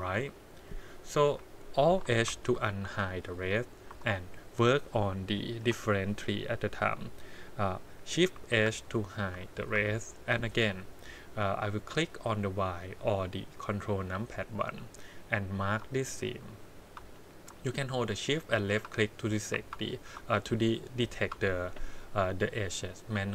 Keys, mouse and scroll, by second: 1.3 KP_1, 2.3 alt+h, 3.0 shift+middle click, 3.9 3, 4.4 click, 5.6 l, 8.3 shift+h, 9.4 click, 9.7 2, 11.5 middle click, 14.0 click, 15.6 click, 16.1 shift+click, 16.6 shift+click, 17.8 shift+middle click, 19.1 click, 19.8 click, 20.4 shift+click.